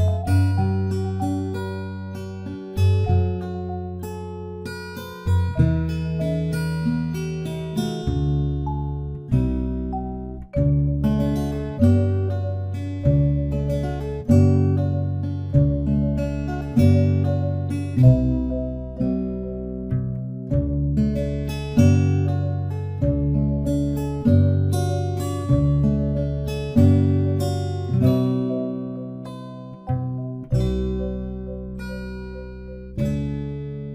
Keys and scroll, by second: 14.4 ctrl+d.